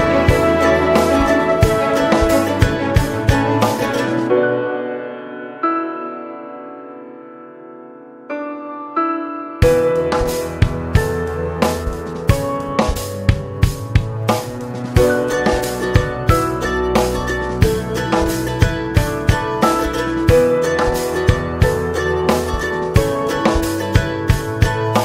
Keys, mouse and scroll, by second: 1.8-3.4 middle drag, 3.4 click, 4.6 click, 5.1 click, 5.7 click, 7.5 ctrl+l, 10.8 click, 11.1-13.5 middle drag, 13.5-15.7 right drag, 15.7 scroll down 3, 15.9-17.6 middle drag, 17.6-19.1 scroll up 1, 19.8 click, 20.4 middle click, 20.9 click, 21.8-23.8 middle drag, 23.8 scroll up 1, 24.0 space.